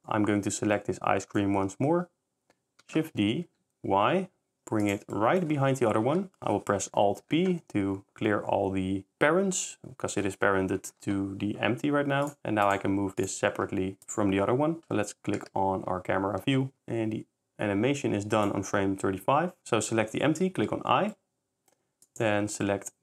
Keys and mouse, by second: 2.0 s, 3.5 shift+y, 6.9 a, 7.2 alt+p, 10.9 alt+p, 12.4 r, 12.6-13.1 drag, 13.2 click, 13.5 g, 19.6 i, 20.6 i, 22.0 click.